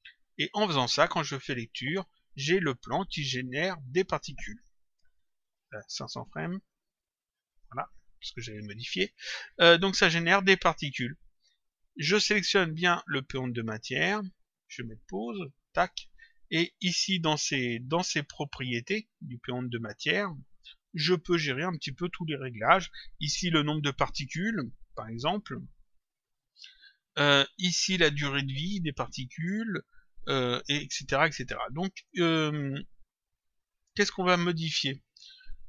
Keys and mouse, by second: 0.0 click, 1.6 click, 3.8 click, 5.5 Return, 7.2 click, 11.7 click, 13.2 click, 15.8 click, 16.9 click, 20.2 click.